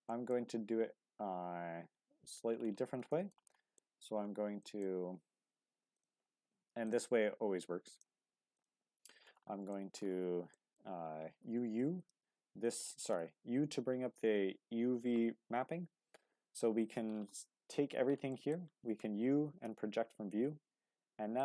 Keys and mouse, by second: 0.1 shift+middle drag, 0.8 Tab, 3.1 shift+middle click, 3.8 shift+click, 4.6 shift+click, 5.9 click, 8.5 shift+click, 9.7 shift+middle click, 10.5 shift+middle click, 11.6 u, 17.7 a, 18.3 shift+middle click, 18.9 u.